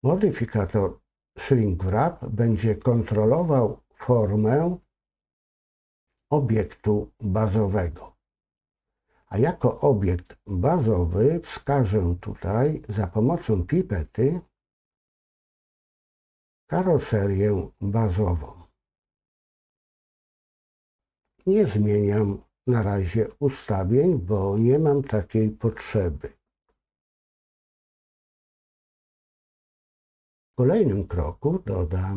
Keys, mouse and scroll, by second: 14.3 click.